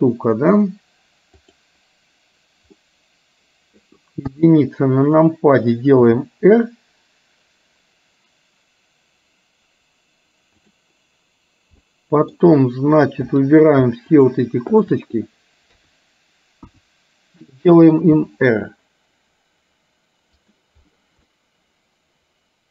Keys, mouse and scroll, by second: 1.4 click, 2.9-3.9 middle drag, 4.4 KP_1, 6.1 r, 11.9-12.4 middle drag, 14.8 shift+click, 15.8 KP_3, 17.1 KP_1, 18.1 r, 21.4-22.7 middle drag.